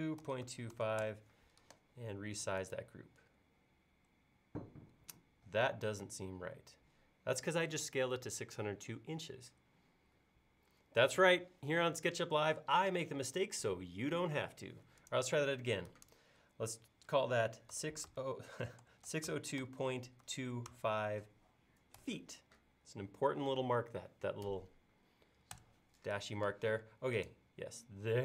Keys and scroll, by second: 1.1 typing, 17.8-18.1 typing, 25.6 Return.